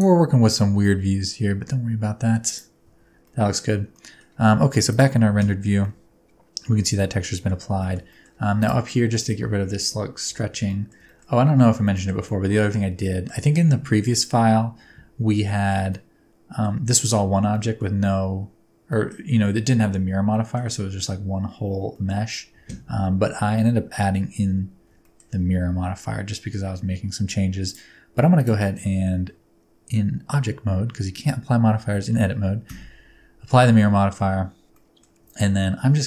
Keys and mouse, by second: 0.4 r, 2.8 Tab, 3.2 middle click, 4.0 middle click, 5.9-7.4 middle drag, 7.8 shift+middle click, 8.1 middle click, 9.4 Tab, 10.3 a, 10.6 middle click, 11.0 shift+middle click, 11.9 shift+middle click, 12.2-13.2 middle drag, 15.8 middle click, 17.5 middle click, 18.8 middle click, 20.2 middle click, 21.9 middle click, 25.0 shift+middle click, 28.3 middle click, 28.7 Tab, 32.6 ctrl+a, 34.2 Tab, 34.7 middle click, 35.2 a.